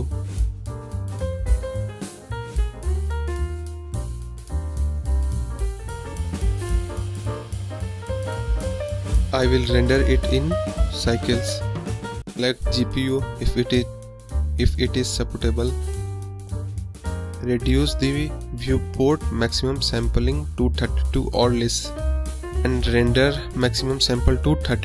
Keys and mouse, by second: 0.1-0.5 drag, 0.5 middle click, 0.9 middle drag, 1.1 click, 9.9 click, 10.3-12.1 drag, 12.6-16.0 drag, 16.4-18.9 drag, 20.0-21.0 drag.